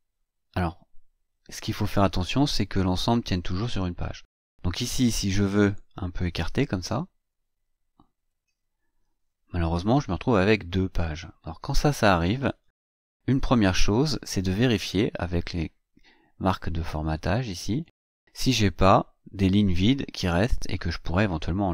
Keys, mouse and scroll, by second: 1.4-1.7 scroll up 2, 2.5-2.8 scroll down 2, 3.0-3.3 scroll down 2, 3.5-4.1 scroll up 2, 4.1-4.4 scroll down 2, 4.7 scroll up 2, 5.5 click, 6.8 Return, 8.2 Return, 8.8-9.5 scroll down 3, 11.5-11.8 scroll up 2, 12.0-12.4 scroll up 2, 12.4-16.8 scroll down 4, 16.8 click, 17.5 click, 18.8-21.7 scroll down 2.